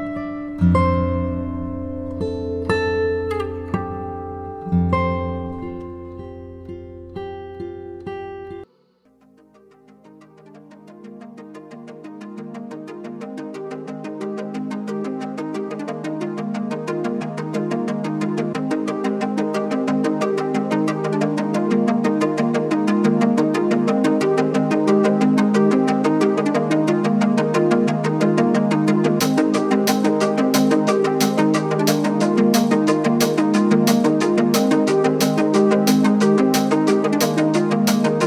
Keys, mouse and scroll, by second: 1.7-2.2 scroll up 4, 2.4-3.0 shift+middle drag, 3.0-4.0 scroll up 1, 4.0 s, 7.1-8.0 middle drag, 8.0 click, 8.4-10.7 middle drag, 10.7-11.6 scroll down 1, 11.6 click, 12.1-13.2 scroll down 5, 13.2-14.1 middle drag, 14.1-15.0 scroll up 4, 15.0-15.7 shift+middle drag, 15.7 click, 16.2-17.7 right drag, 17.7-18.1 scroll down 1, 18.1 click, 18.5-19.1 scroll down 2, 19.1-21.2 middle drag, 21.2-21.6 scroll down 5, 21.6-23.1 middle drag, 23.1-23.5 scroll up 2, 23.5-24.6 shift+middle drag, 24.6 shift+a, 28.9-31.9 drag, 32.4 click, 33.2-33.8 scroll up 2, 33.8-34.2 scroll down 1, 34.2 g, 36.8 s.